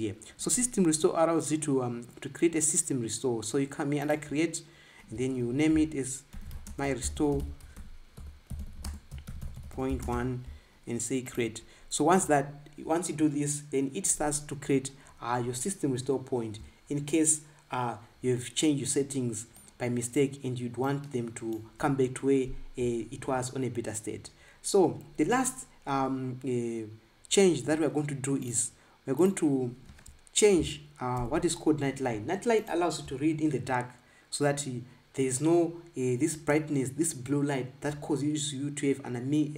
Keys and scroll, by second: 31.9 ctrl+b.